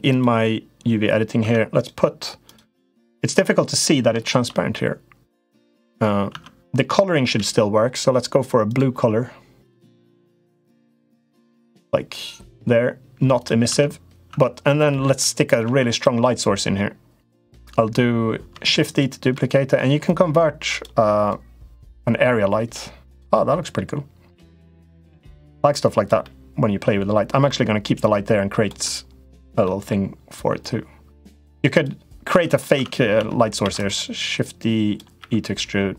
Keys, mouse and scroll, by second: 1.1 Tab, 2.2 click, 4.5-5.6 middle drag, 6.1 Tab, 6.6 click, 7.0 l, 8.4 click, 10.2 g, 13.4 Tab, 14.0 Tab, 14.6 middle click, 15.3 Tab, 15.7 click, 18.6 shift+d, 19.2 middle click, 21.0-23.0 drag, 23.2 middle click, 24.3-25.9 drag, 26.0 middle click, 26.9 middle click, 27.8 click, 28.7 middle click, 29.5 middle click, 30.4 click, 31.5 click, 32.1 Tab, 32.2 click, 32.5 Tab, 32.9 Tab, 33.4 shift+d, 34.3 click, 35.0 e.